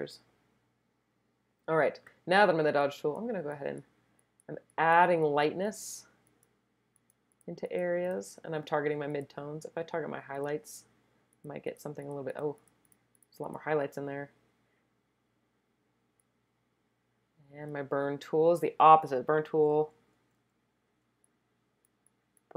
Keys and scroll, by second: 19.5-20.4 typing.